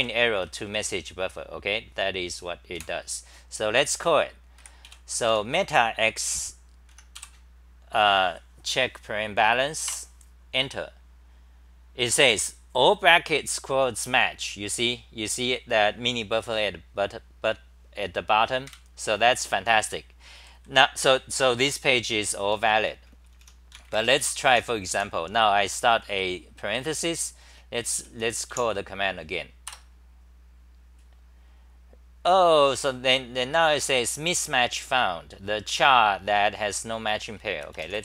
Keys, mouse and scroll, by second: 0.0-1.1 typing, 3.1 super+w, 4.0 g, 4.6 1, 4.9 j, 5.7 a, 7.0 End, 7.2 k, 9.9 Return, 18.7 super+=, 20.4 d, 20.5 d, 20.7 d, 22.5-23.4 typing, 24.2 Home, 24.5 t, 25.0 t, 26.0 c, 26.1 c, 27.7-29.0 typing, 29.7 Return.